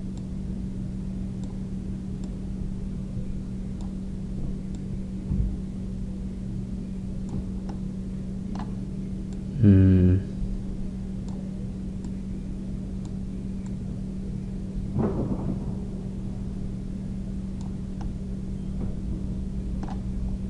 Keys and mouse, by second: 3.3-8.7 drag, 8.7-10.4 middle drag, 10.4-16.6 drag, 19.1-20.4 middle drag.